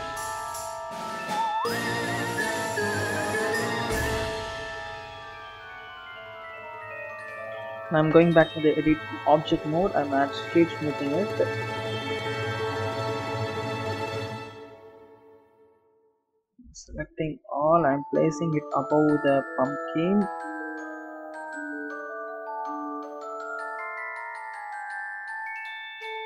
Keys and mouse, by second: 0.4 r, 0.9-2.2 drag, 3.2 alt+click, 3.5 s, 4.5 click, 4.6 click, 4.8 alt+click, 5.0 alt+click, 5.2 alt+click, 5.5 s, 6.9 Tab, 8.7 right click, 11.3-12.7 drag, 13.9 click, 15.5 Tab, 16.6 a, 17.6-19.2 drag, 20.8 click, 21.1 Tab, 21.7 click, 21.9 click, 22.3 click, 22.6 ctrl+r, 22.8 a, 23.1 Tab, 23.3 ctrl+r, 24.0 s, 24.9 Tab, 25.4 a, 25.5 Tab, 25.9 click.